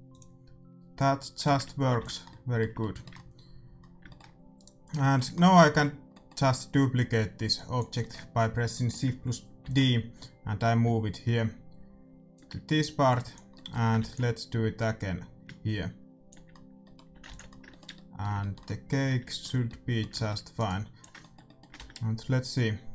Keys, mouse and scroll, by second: 0.3-1.8 drag, 1.5 shift+z, 1.9 ctrl+s, 2.2-3.6 middle drag, 4.0-7.8 middle drag, 4.5-6.2 right drag, 7.5-9.3 drag, 7.9 middle click, 9.1-10.1 middle drag, 9.6 shift+d, 10.1-12.0 drag, 13.0-16.9 drag, 13.5-15.1 middle drag, 13.9 shift+d, 17.0 a, 17.2 ctrl+s, 20.5 right click, 21.0 Tab, 21.0 ctrl+s, 21.0 a.